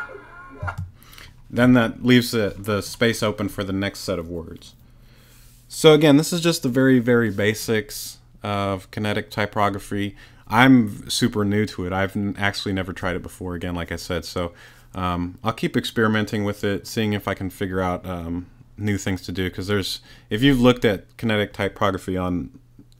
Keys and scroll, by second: 0.6 space.